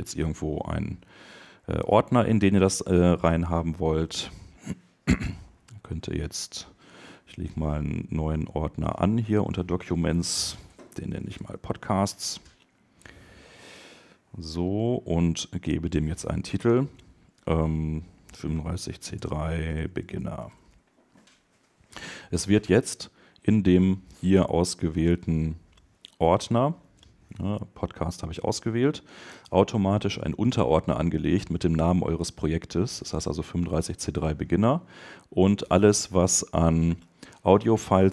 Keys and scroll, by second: 11.9 Return, 26.6 super+Up.